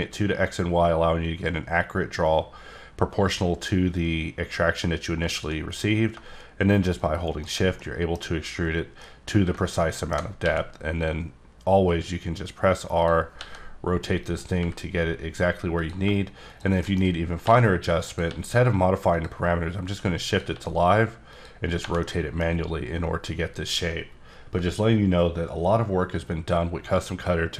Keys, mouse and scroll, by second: 5.3 shift+click, 7.0 shift+click, 7.3 shift+right click, 7.8 middle click, 8.2 scroll up 2, 9.0 middle click, 10.4 r, 13.0 click, 13.4 g, 14.6 r, 15.8 click, 16.8 shift+middle click, 17.0 shift+scroll up 3, 17.4 r, 18.1 click, 18.3 g, 19.1 click, 19.5 scroll down 1, 19.9 r, 20.3 click, 20.5 g, 21.3 click, 21.6 scroll down 4, 22.0 middle click.